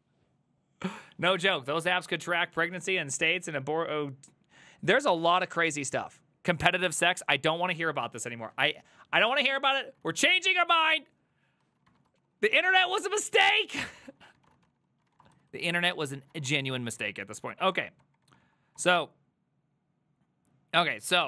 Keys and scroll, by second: 10.1 alt+{, 11.7 ctrl+a, 11.9-17.0 typing, 12.2 ctrl+c, 12.4 ctrl+c, 15.7 ctrl+u, 16.1 ctrl+c, 17.6 Up, 17.8 Up, 18.1 Up, 18.3 Up, 18.5 Up, 18.8 Down.